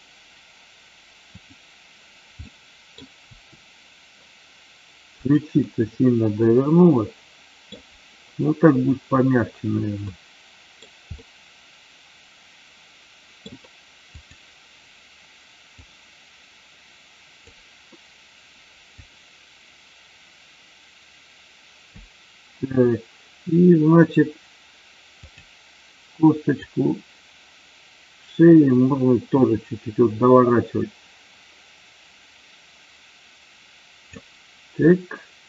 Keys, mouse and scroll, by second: 1.2 click, 2.3 middle click, 3.2 r, 5.7-7.7 middle drag, 9.9 middle click, 11.2-13.4 middle drag, 14.0 click, 15.7-17.4 drag, 18.9-21.9 drag, 25.1 click, 26.6-34.1 drag, 35.0-35.4 middle drag.